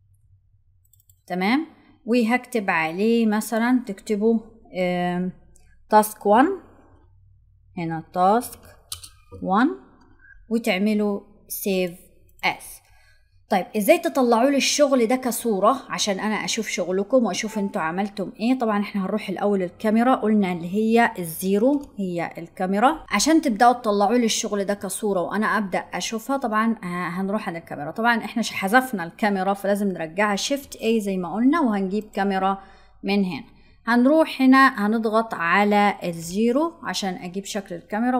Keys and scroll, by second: 30.3 shift+a.